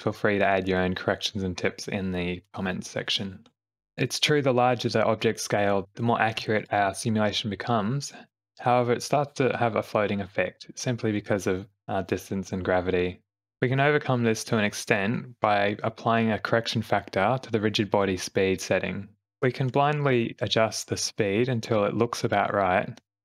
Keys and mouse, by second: 4.8 space, 5.4 shift+Left, 6.3 a, 19.2-22.3 drag, 20.6 BackSpace, 20.8 BackSpace, 23.0 click.